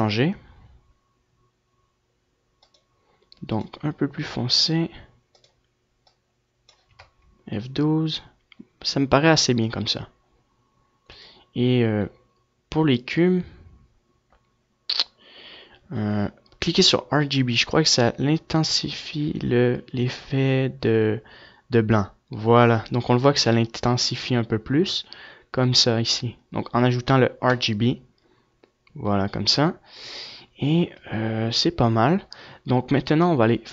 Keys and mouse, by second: 3.3-7.7 drag, 32.1 F11, 32.7-33.7 middle drag.